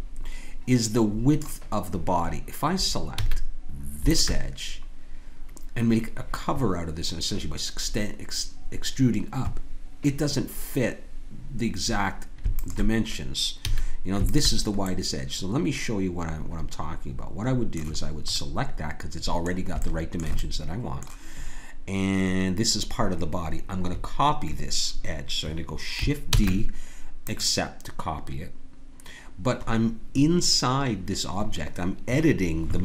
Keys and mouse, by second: 3.1 a, 4.1-6.4 drag, 12.5-15.9 drag, 13.6 a, 26.4 shift+d.